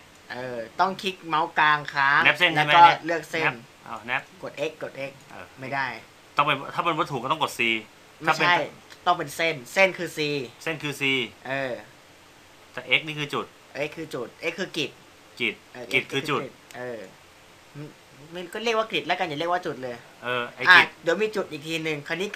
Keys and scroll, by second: 12.5 x, 17.1 x, 21.2 c.